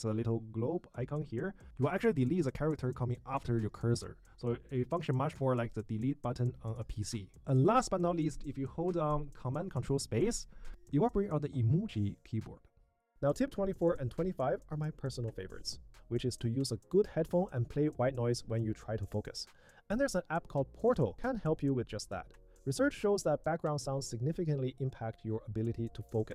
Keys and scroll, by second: 8.9 ctrl+super+space.